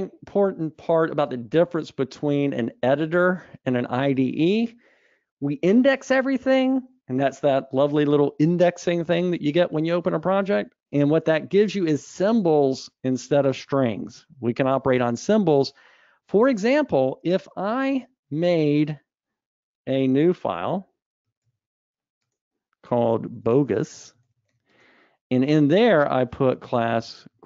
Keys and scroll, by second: 20.5 super+Up, 21.6 super+Up, 21.9 super+n.